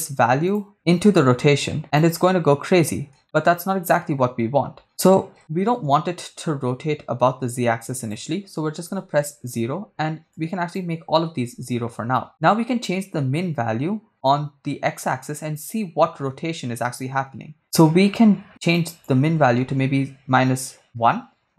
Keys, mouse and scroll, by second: 0.7-2.0 drag, 3.2 shift+middle click, 4.3-4.8 scroll up 3, 8.0-9.1 drag, 10.3-11.7 shift+drag, 12.8-18.8 shift+drag, 18.9-21.0 shift+drag.